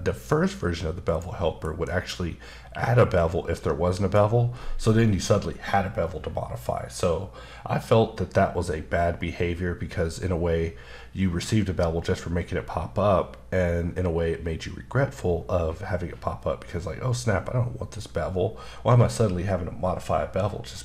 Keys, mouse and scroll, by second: 1.0 click, 1.8 b, 3.1 click.